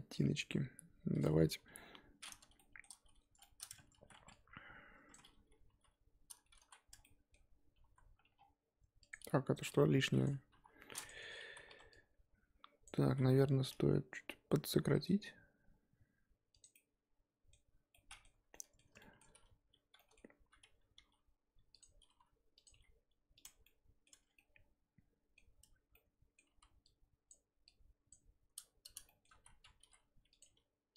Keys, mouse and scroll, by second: 1.2 click, 1.7 KP_3, 2.6 shift+middle click, 2.9-3.4 scroll up 4, 3.4 shift+middle click, 3.8 Tab, 4.0 z, 4.1 1, 5.1 click, 5.3-5.7 scroll up 2, 5.7 t, 6.6 ctrl+z, 7.0 middle click, 7.8 ctrl+z, 8.3-8.9 scroll down 5, 9.1 click, 10.2 x, 10.5 KP_3, 10.8 scroll up 1, 11.0 click, 11.2 Tab, 11.5 z, 12.8 click, 13.0 scroll up 1, 14.9 g, 16.7-20.9 middle drag, 20.9 g, 22.0 r, 22.6 g, 23.6 middle click, 24.1 Tab, 24.2 scroll down 4, 24.3-25.4 middle drag, 25.4 scroll up 1, 25.6 Tab, 25.9 middle click, 26.5 z, 27.3 click, 28.1 click, 29.1 shift+middle click, 29.3 z, 29.8 r, 30.4 g.